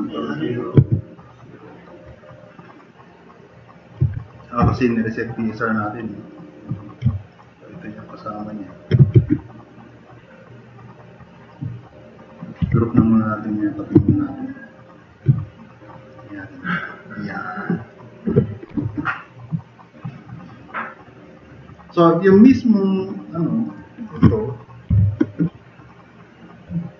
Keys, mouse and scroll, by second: 0.8 alt+q, 2.8 alt+q, 3.3-3.8 drag, 4.0 alt+q, 9.2 alt+q, 9.8-11.5 drag, 11.7-12.1 drag, 12.6 alt+g, 13.0-13.3 drag, 14.0 alt+q, 16.1-16.5 drag, 24.9 shift+F6.